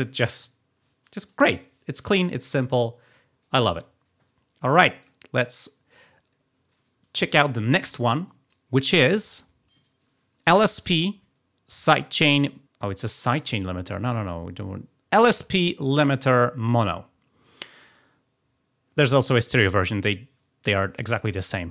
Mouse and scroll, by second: 1.8 scroll up 1, 2.6 click, 4.9 click, 5.3 click, 7.9 click, 9.1 click, 13.1 click.